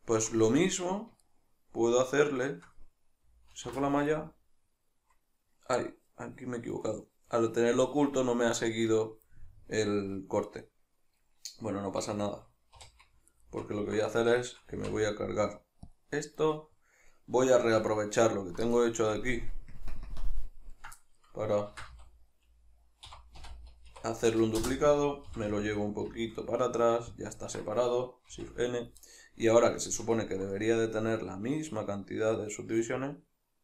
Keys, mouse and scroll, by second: 0.4 Tab, 3.6 alt+h, 9.3 middle click, 12.8 3, 13.3 alt+right click, 14.4 shift+right click, 14.7 x, 16.5-17.9 middle drag, 17.9 alt+right click, 19.2 ctrl+KP_Add, 19.9 ctrl+KP_Subtract, 21.8 shift+d, 24.7 Return, 27.3 click, 28.4 shift+n, 29.1-33.6 middle drag.